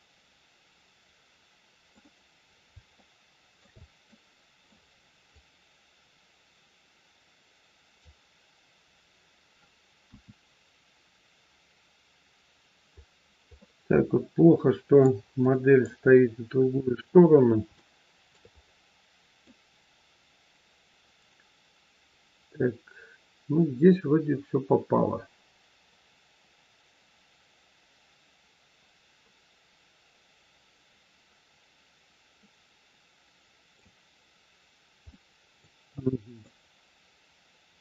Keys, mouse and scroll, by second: 2.5 scroll up 2, 3.0 shift+middle click, 4.1 middle click, 5.3 click, 10.0 KP_1, 13.4 middle click, 15.3 middle click, 16.0 scroll down 3, 17.7 shift+middle click, 18.0 shift+middle click, 18.5 scroll up 4, 19.3 middle click, 35.0 middle click, 35.8 middle click, 36.4 scroll up 1, 37.7-37.8 scroll down 4.